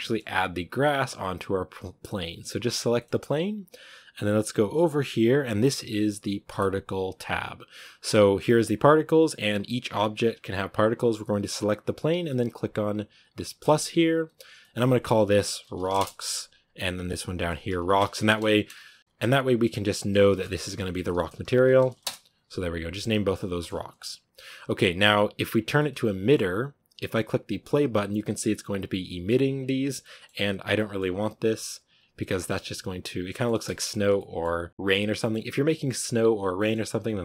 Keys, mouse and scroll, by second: 0.7 right click, 2.8-9.7 middle drag, 9.7 right drag, 10.0 right click, 13.6-14.5 drag, 15.8-21.9 drag, 23.5-25.3 middle drag, 25.3-25.6 scroll down 2, 25.6-27.4 middle drag, 27.4-27.8 drag, 27.8-29.3 middle drag, 29.3-29.9 scroll down 2, 29.9-30.5 middle drag, 30.5-31.8 scroll up 3, 30.6 middle drag, 31.8-32.4 scroll down 2, 32.4-33.9 middle drag, 33.9 scroll down 1, 34.0-36.7 middle drag, 36.7-37.1 scroll up 2, 37.1 scroll down 1.